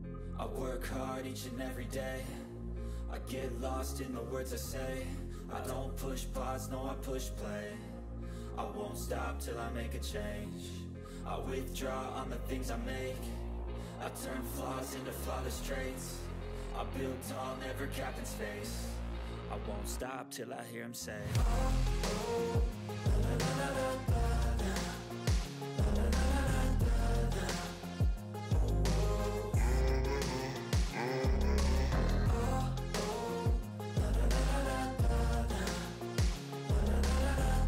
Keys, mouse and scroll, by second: 0.0-1.4 typing, 1.9 click, 3.4-3.8 ctrl+scroll down 3, 3.7 ctrl+middle click, 4.5-4.9 drag, 6.3 ctrl+scroll up 1, 6.8-7.8 drag, 8.1-8.5 shift+drag, 9.3-10.1 drag, 11.8 ctrl+scroll down 1, 12.3 click, 13.4 click, 14.5-15.0 click, 16.5 shift+click, 18.0 ctrl+g, 18.3 ctrl+scroll down 1, 18.4-18.8 ctrl+middle click, 18.7 ctrl+scroll up 1, 19.1 ctrl+d, 19.4-20.5 drag, 20.7 ctrl+scroll down 1, 20.8 ctrl+middle click, 21.1 ctrl+scroll up 1, 21.6 ctrl+scroll down 1, 21.7 click, 22.8-23.2 typing, 24.0 ctrl+a, 24.7 click, 26.0 ctrl+scroll up 1, 26.4-27.5 drag, 28.3 ctrl+scroll down 1, 29.0-29.6 click, 29.7 ctrl+scroll up 1, 30.4-32.9 drag, 34.3-34.6 shift+drag, 35.9-36.2 shift+drag.